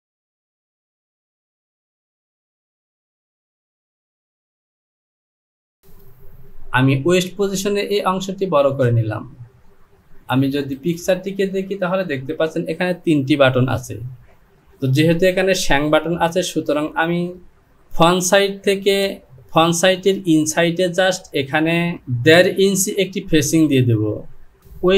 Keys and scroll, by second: 3.6 Home, 5.7 Delete, 6.6 Return.